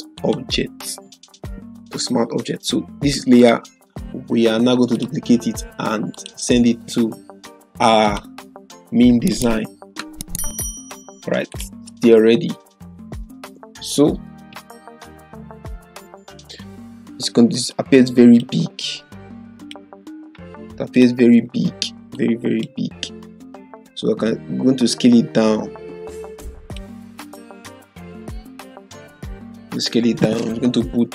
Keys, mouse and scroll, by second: 0.1 click, 3.4 right click, 4.9 click, 5.3 click, 14.5 ctrl+-, 17.7-18.6 drag, 24.9-26.8 drag, 27.7-29.8 scroll down 1.